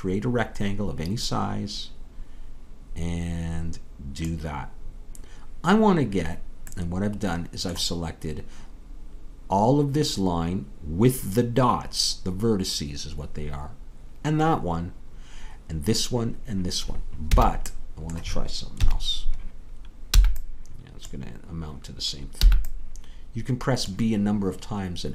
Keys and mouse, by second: 17.3 a, 18.7 KP_3, 20.2 b, 22.4 b.